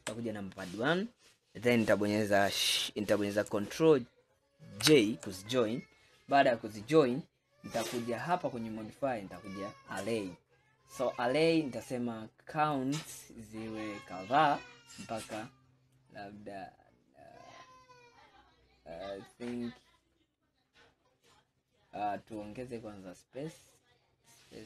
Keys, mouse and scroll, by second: 0.0 KP_1, 1.2 scroll up 1, 4.9 ctrl+j, 9.5-11.3 drag, 12.8-14.5 drag, 14.5 scroll down 2, 16.0-19.2 drag, 22.4-24.6 drag.